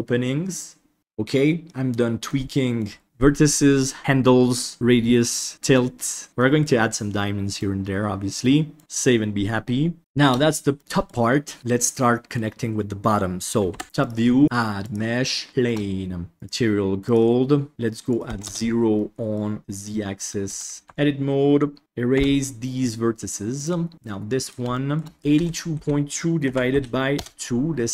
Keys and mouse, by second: 2.2-2.7 middle drag, 6.3 middle drag, 7.1-7.5 middle drag, 8.3-8.7 middle drag, 8.8 ctrl+s, 10.0 shift+middle drag, 10.7 middle click, 11.7-12.3 middle drag, 13.6 KP_7, 13.9 click, 14.4-15.5 drag, 15.5 shift+middle drag, 16.4 click, 18.2-18.5 drag, 19.0 middle click, 19.6 KP_7, 20.4 Tab, 20.8 alt+z, 22.1 Delete, 24.1 middle click, 24.7 shift+middle click, 25.2-27.2 drag.